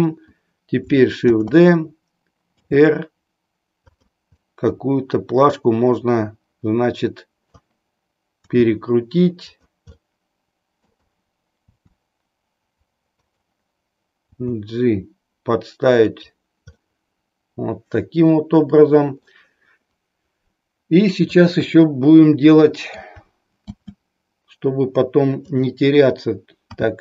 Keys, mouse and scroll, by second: 1.2 shift+d, 2.5 r, 4.5-7.8 middle drag, 8.6 r, 9.5 click, 10.0-11.1 middle drag, 11.7 r, 13.3 click, 14.4 g, 16.2 click, 16.7-19.3 middle drag, 21.4-23.1 middle drag, 23.9 shift+d, 26.6 s.